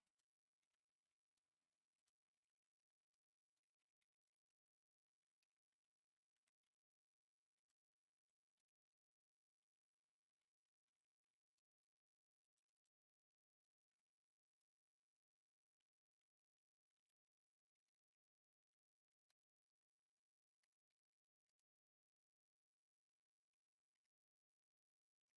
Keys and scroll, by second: 0.0-9.1 typing, 10.5-11.3 typing, 12.3-13.1 typing, 16.7-21.9 typing, 20.5 Return, 23.6-25.3 typing.